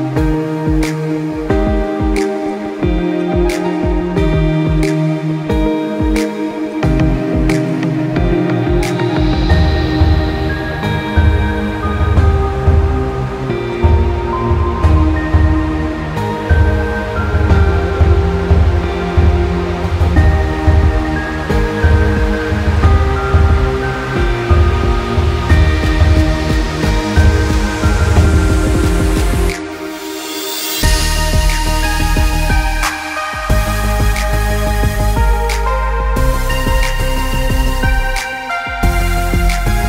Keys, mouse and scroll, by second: 0.1 g, 2.2 middle click, 2.5-3.2 scroll up 3, 2.9 middle click, 3.2 middle click, 3.7 middle click, 4.5 g, 7.5 middle click, 9.8 click, 10.3 g, 12.1 middle click, 12.6 middle click, 13.1 click, 13.6 g, 15.0 click, 15.5 g, 17.7 middle click, 18.9-19.3 scroll down 3, 19.1 middle click, 20.3 middle click, 20.8-21.3 scroll up 5, 21.1 middle click, 21.7 middle click, 22.5-25.0 shift+click, 25.1 middle click, 25.5 scroll down 2, 25.8 middle click, 26.5 middle click, 27.5 g, 29.7 middle click, 30.4 ctrl+z, 31.1 middle click, 31.7 click, 32.1 click, 32.8 g, 35.5 click, 36.8 shift+click, 38.1 g.